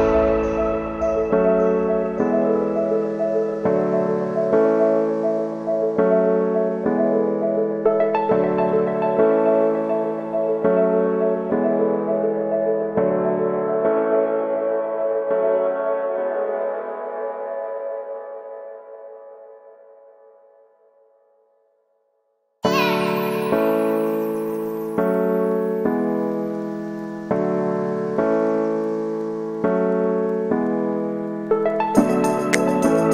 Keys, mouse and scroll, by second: 0.7 click, 1.0 alt+shift+right click, 1.5 middle click, 1.9 ctrl+b, 3.1-4.5 middle drag, 4.5 Tab, 4.8 w, 7.5-8.6 shift+drag, 8.6 scroll down 3, 8.8-10.2 middle drag, 10.2 Tab, 10.4 right click, 10.5 l, 11.3 shift+middle click, 11.7 shift+d, 13.3-14.4 drag, 14.4 scroll up 1, 14.6 g, 15.1 shift+middle click, 15.4 scroll down 1, 15.5 shift+d, 16.5 shift+middle click, 16.9-17.5 scroll down 2, 17.1 shift+middle click, 17.5 Tab, 17.7 shift+middle click, 18.0 scroll down 1, 18.2 middle click, 19.1-19.5 scroll up 1, 19.7 middle click, 20.1 shift+a, 21.7-23.9 drag, 23.9 w, 24.8 q, 25.9-26.9 scroll up 1, 26.9 shift+click, 27.5 shift+middle click, 27.9 scroll up 1, 28.1 g, 28.8 middle click, 29.3 click, 29.7 scroll down 1, 29.8 shift+middle click, 30.2 g, 30.9 Tab, 31.2 s, 32.0 middle click, 32.2 scroll up 2, 32.4 s.